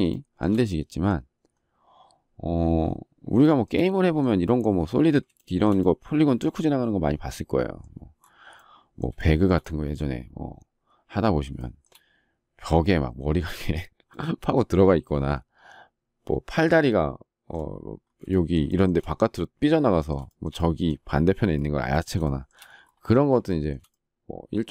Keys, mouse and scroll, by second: 0.1 shift+middle click, 3.3 shift+middle click, 5.3 shift+middle click, 9.1 shift+middle click, 11.5 shift+middle click, 18.2 shift+middle click, 18.6 shift+middle click, 20.2 shift+middle click, 22.2 shift+middle click, 23.4 shift+middle click.